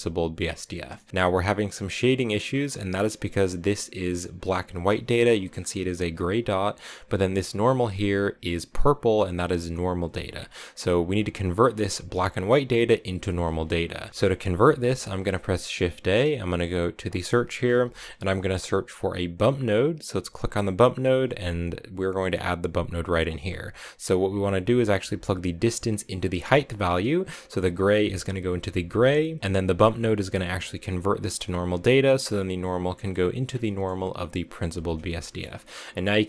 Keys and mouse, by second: 0.5 shift+click, 2.1 middle click, 3.2-5.5 drag, 11.0-13.9 drag, 15.1 shift+a, 23.1 click, 25.8 click, 29.4 click, 32.0 click, 33.6 click, 35.0 shift+click.